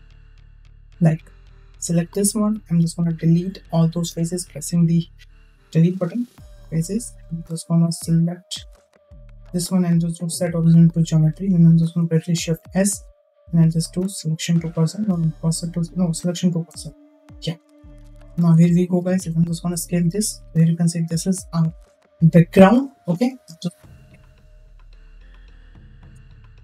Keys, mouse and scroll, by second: 0.2 Tab, 0.8 middle click, 1.7 3, 1.8 click, 3.1 ctrl+i, 5.5 Delete, 7.3 Tab, 8.4-10.8 right drag, 12.3 shift+s, 17.2-17.5 middle drag, 18.3 KP_0, 19.5 s, 25.6 click.